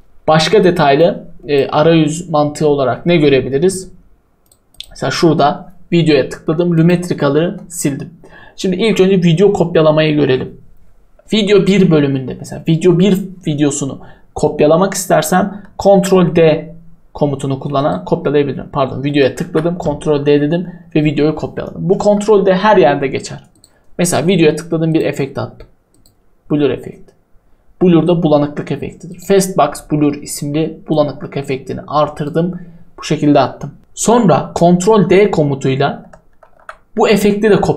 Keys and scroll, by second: 7.4 Delete, 15.8 ctrl+d, 22.0 Delete, 36.5 ctrl+d.